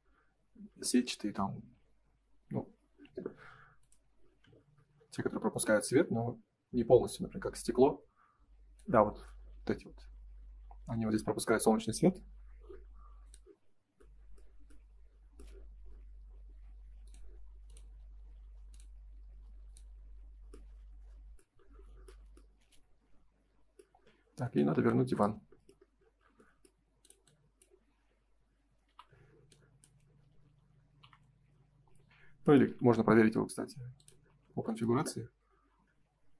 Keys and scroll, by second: 28.8 Delete.